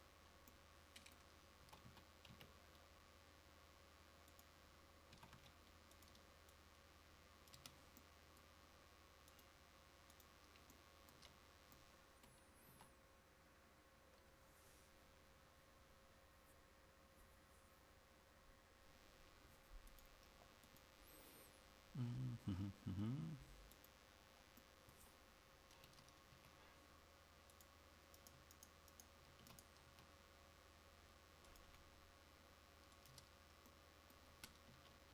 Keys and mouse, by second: 0.0-1.0 drag, 5.3 s, 7.6 Tab, 7.6 drag, 12.8 KP_5, 26.0 Tab, 26.4 a, 29.5 e, 33.3 Tab, 34.8 KP_1.